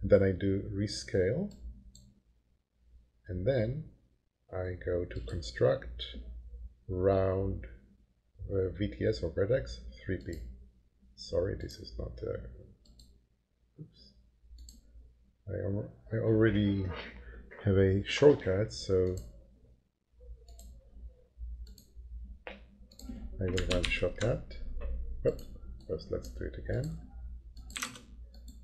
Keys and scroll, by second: 23.8 ctrl+shift+9, 27.5-28.3 typing.